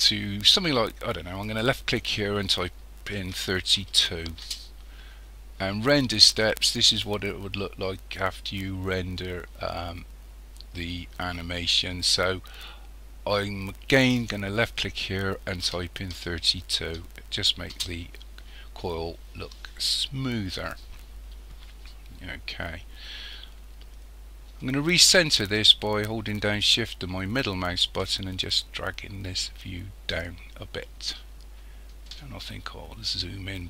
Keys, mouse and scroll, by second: 1.5 click, 14.0 click, 27.0-30.1 shift+middle drag, 32.9-33.6 scroll up 2.